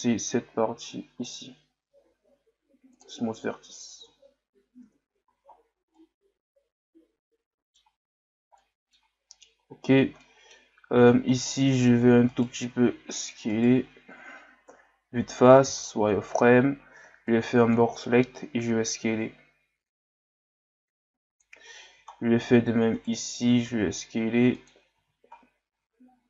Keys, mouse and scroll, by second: 5.5 scroll down 1, 5.9-8.1 middle drag, 8.1-8.6 scroll down 1, 8.6-9.2 middle drag, 9.2-10.2 scroll up 3, 10.2-10.7 middle drag, 10.7 scroll up 1, 11.0 Tab, 11.4 middle click, 12.3 alt+right click, 12.8 s, 16.2 scroll down 2, 17.0 b, 22.1-22.9 scroll down 1, 22.9 alt+right click, 25.4-25.7 scroll down 2, 25.7 Tab.